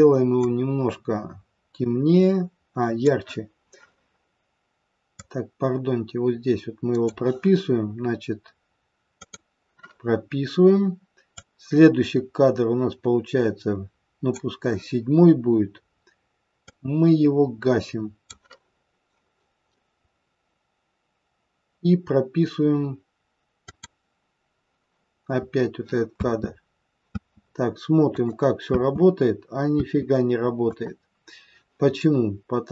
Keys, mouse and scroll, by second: 5.1 click, 9.2 click, 11.5 click, 16.6 click, 23.7 click, 26.2 space, 27.2 space, 28.1 click, 28.7 space, 29.7 space, 30.6 click.